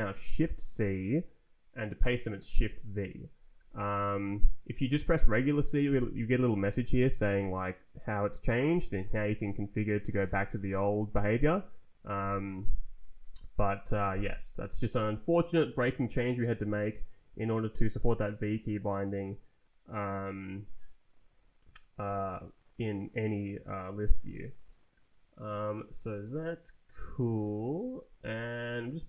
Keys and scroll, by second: 0.6 shift+c, 3.6 c, 12.1 Escape.